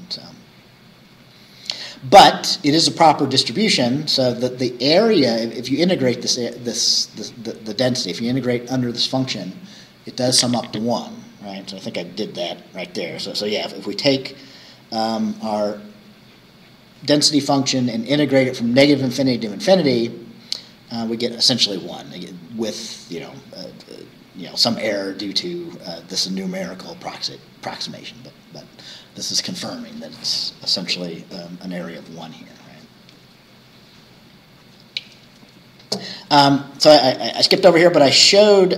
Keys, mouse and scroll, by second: 0.3 scroll down 2, 3.5-4.2 scroll down 4, 11.7-13.5 scroll down 3, 13.5 scroll up 2, 22.5 scroll down 2.